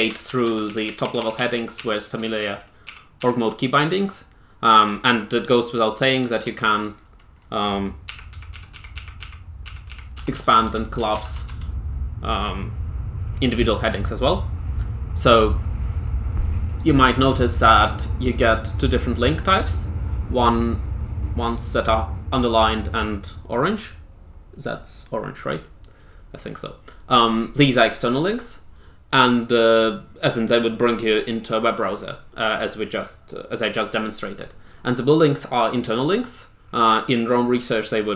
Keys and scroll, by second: 0.0-3.1 typing, 4.8 Tab, 6.1 shift+Tab, 8.0-11.1 typing, 11.4 Tab, 12.9 typing.